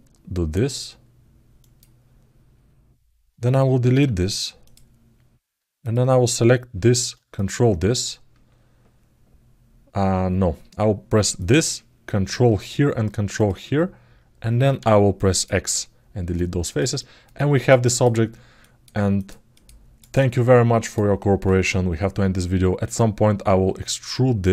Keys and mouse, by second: 5.6 click, 7.1 ctrl+click, 11.2 click, 13.2 ctrl+click, 16.1 alt+middle click, 16.7 ctrl+alt+middle click, 17.1 alt+middle click, 17.6 ctrl+alt+middle click, 18.3 alt+middle click, 18.9 click, 19.8 click, 20.6 click.